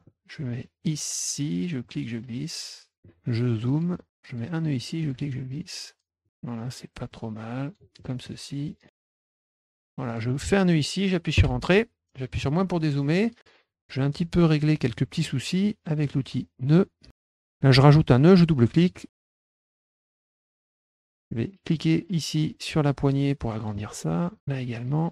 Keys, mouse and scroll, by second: 0.0 middle click, 1.8-2.9 drag, 2.9 middle click, 4.4 click, 6.2 click, 7.1 click, 7.9 middle click, 9.2 click, 10.0 click, 11.3 Return, 13.1 middle click, 13.8 middle click, 14.1 middle click, 16.0 click, 17.1 click, 17.2 middle click, 17.2 scroll up 2, 17.3 middle click, 18.6 click, 18.8 click, 19.1 click, 19.8 click, 20.1 middle click, 20.9 middle click, 21.7-23.6 drag, 24.4 click.